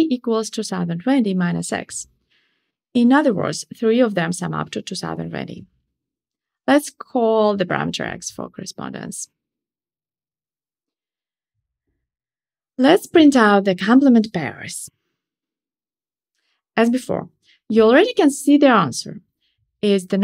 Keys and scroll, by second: 12.5 Tab, 14.4 Return, 15.1 ctrl+shift+r.